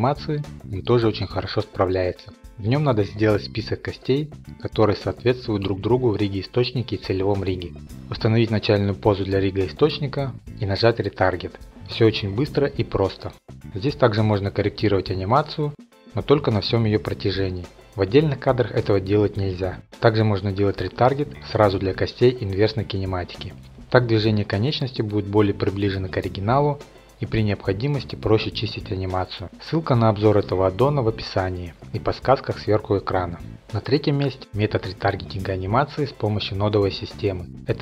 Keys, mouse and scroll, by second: 36.8-37.8 drag.